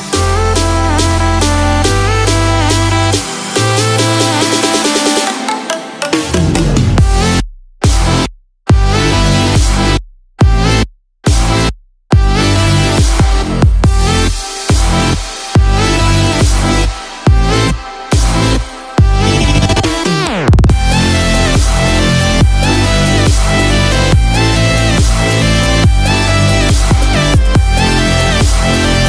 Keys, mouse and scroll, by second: 1.8-2.7 scroll down 1, 3.5 click, 3.5 scroll down 2, 4.3-4.9 scroll up 3, 6.4 click, 8.6 scroll down 1, 9.2 middle click, 9.2-9.8 scroll down 1, 10.6 scroll up 2, 12.2 scroll down 1, 12.5 middle click, 13.0-13.6 scroll up 1, 14.4 i, 17.6 click, 21.5 r.